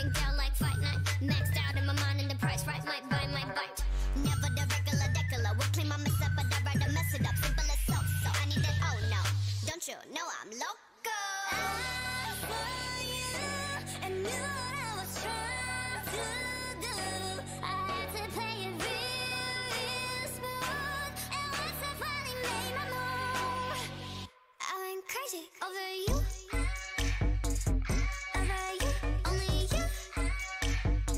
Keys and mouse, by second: 0.1 o, 0.9 click, 1.2 z, 1.7 c, 3.1 click, 4.2 e, 6.5 e, 8.3 e, 8.4-9.7 drag, 9.7 z, 10.0 middle click, 10.3 middle click, 10.6-11.6 drag, 11.2 f, 11.4 f, 12.0 ctrl+z, 12.2 ctrl+z, 13.2 f, 13.6 f, 14.1 f, 15.6 ctrl+z, 15.9 ctrl+z, 16.7 a, 18.5-26.1 drag, 20.3 g, 21.7 g, 22.7 g, 23.5 g, 24.8 g, 26.4-27.7 middle drag, 28.1-31.1 drag, 28.5 g, 29.4 g, 30.6 g.